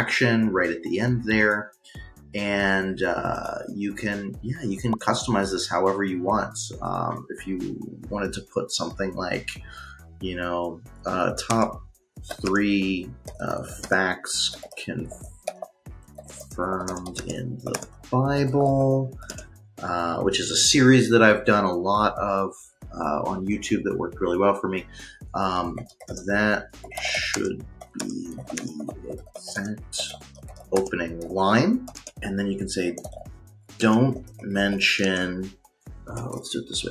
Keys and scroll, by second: 10.2-11.7 typing, 13.0-19.6 typing, 25.3-35.8 typing.